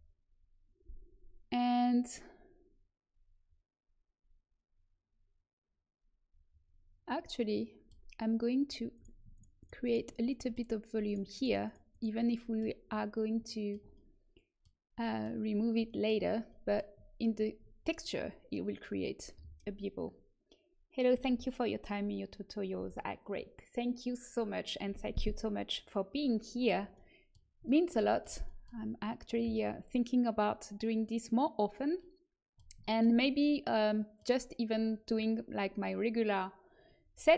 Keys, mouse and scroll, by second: 7.5 middle click, 8.5-9.8 drag, 8.9 right click, 9.3-14.1 middle drag.